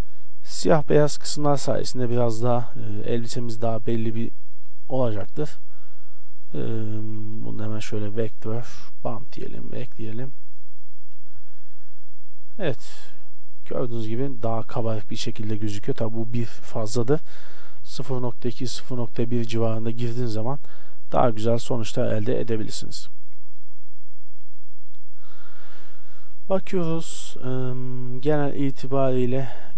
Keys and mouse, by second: 1.9 shift+d, 5.2 shift+d, 8.0 shift+a, 11.4 shift+z, 21.6 middle click, 21.9 middle click, 27.2 middle drag, 27.4 middle click.